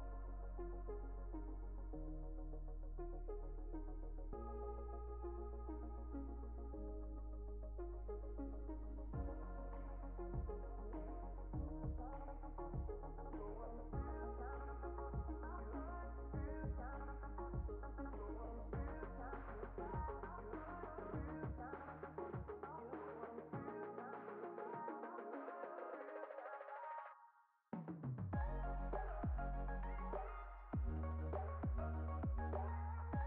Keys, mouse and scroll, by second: 0.3 e, 2.5 click, 3.4 click, 4.2 x, 4.9 ctrl+z, 5.2 x, 5.8 ctrl+z, 6.3 x, 6.9 click, 7.7 ctrl+z, 8.2 click, 8.5 click, 9.0 click, 9.5 click, 9.8 click, 10.4 x, 11.0 click, 11.9 x, 12.5 click, 14.3 click, 14.8 click, 15.8 click, 19.3 click, 20.3 click, 21.7 right click, 22.3 click, 23.6-24.7 drag, 24.7 s, 26.2 click, 26.8 g, 28.7 click, 30.1 click, 31.6 g, 32.4 click.